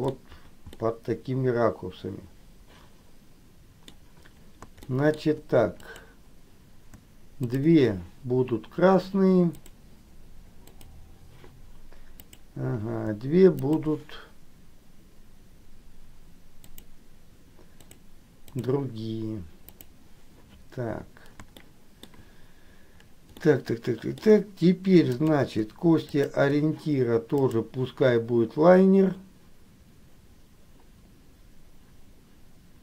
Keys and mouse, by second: 0.9-4.0 middle drag, 5.0 shift+middle click, 5.9 click, 7.6 shift+click, 10.8 click, 12.4 click, 13.8 shift+click, 17.9 click, 19.9 click, 21.7 shift+middle click, 23.5 middle click, 26.2 shift+click, 27.7-32.8 drag.